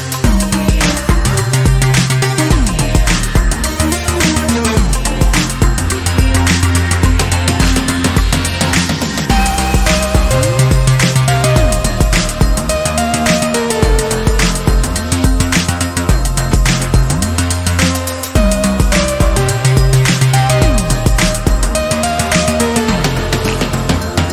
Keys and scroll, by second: 1.0 b, 9.1 ], 9.2 ], 9.9-10.9 ], 11.2 ], 14.9 ctrl+alt+z, 15.2 ctrl+alt+z, 16.4 ctrl+alt+z.